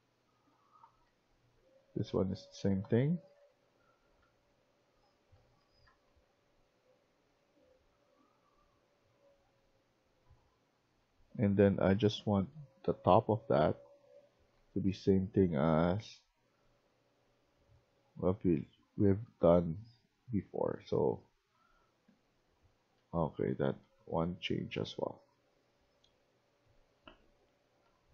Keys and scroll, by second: 0.0-16.7 typing, 18.6-28.1 typing.